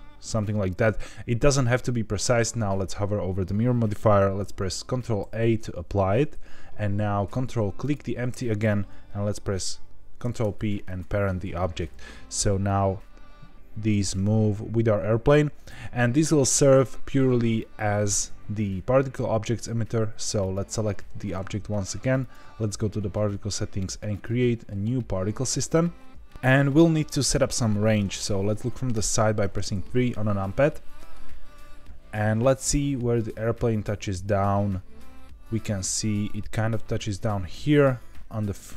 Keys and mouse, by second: 0.3 click, 0.6-0.9 middle drag, 5.2 ctrl+a, 7.8 ctrl+click, 10.2 ctrl+p, 12.7-15.6 drag, 20.4 click, 22.1 click, 24.1-26.4 drag, 28.9 KP_3, 30.6-31.1 shift+middle drag, 32.4-38.7 drag.